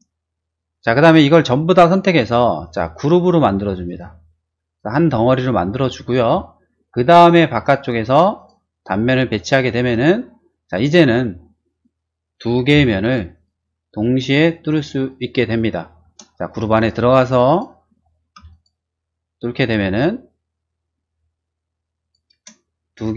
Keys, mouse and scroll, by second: 0.5 shift+click, 2.6 right click, 3.8 click, 7.1 click, 8.3 click, 9.4 click, 10.2 middle click, 10.5 middle click, 11.7 click, 12.7 m, 13.3 click, 15.0 click, 16.0 space, 16.5 click, 16.7 click, 17.5 click, 18.3 m, 18.5 click, 22.0 click, 22.3 space, 22.9 click.